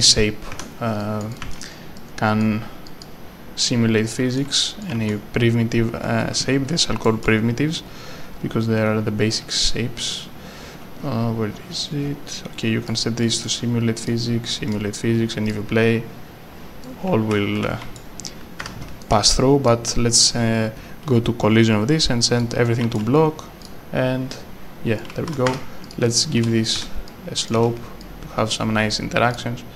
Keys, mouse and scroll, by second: 0.5 w, 1.0 click, 1.4 s, 2.0 click, 4.8 right click, 4.9 a, 6.0 w, 6.2 scroll up 1, 7.0 right click, 9.6 scroll up 1, 9.7-10.1 scroll down 1, 11.7 scroll up 1, 12.9 scroll up 1, 12.9 click, 13.5 a, 14.7 click, 16.8 right click, 17.6 w, 18.6 Escape, 19.0 right click, 19.3 s, 19.6 click, 20.1-20.4 scroll up 1, 21.7 scroll down 1, 22.5 click, 23.6 click, 25.0 right click, 25.0 a, 25.5 Escape, 25.5 s, 25.8 click, 26.4 e, 27.1 click, 27.5 e, 28.0 e, 28.5 click.